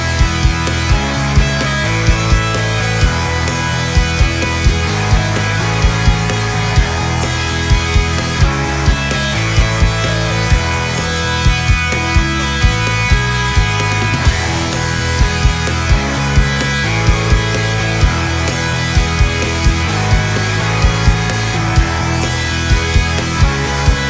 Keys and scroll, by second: 7.0 ctrl+z, 15.4 ctrl+z.